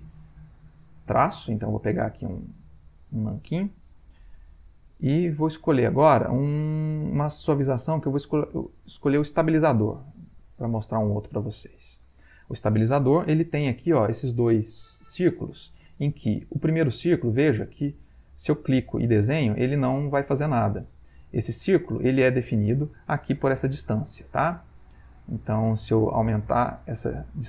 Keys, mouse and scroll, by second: 3.3 click, 5.6 click, 9.3 click, 10.2 middle click, 10.9-12.2 ctrl+middle drag, 17.2-22.8 drag, 24.5 click, 26.4-27.4 drag.